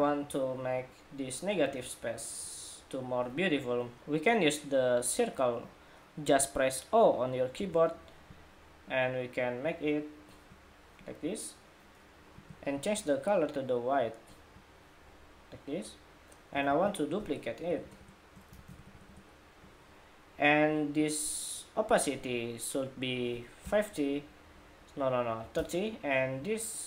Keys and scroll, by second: 16.5 super+d, 18.3 super+d.